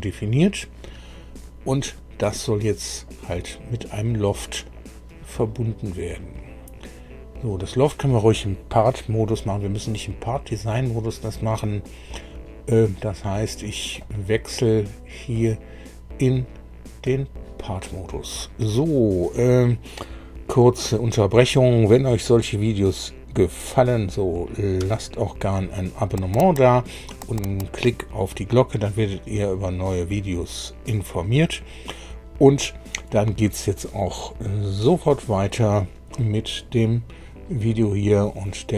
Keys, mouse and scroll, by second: 2.3-3.3 middle drag, 3.5-4.9 middle drag, 14.0 click, 17.0 click.